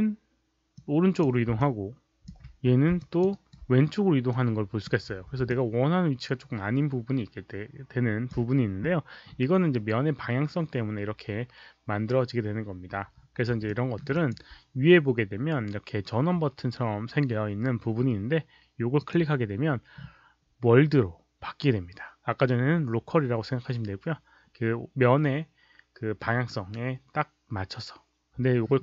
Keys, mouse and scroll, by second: 0.7-1.1 drag, 1.5-2.2 alt+drag, 2.3 z, 2.9 alt+click, 3.2 alt+right click, 4.2-4.8 drag, 5.0 z, 5.4-8.2 alt+drag, 13.6 alt+middle drag, 14.1 alt+click, 14.1 z, 18.9 click.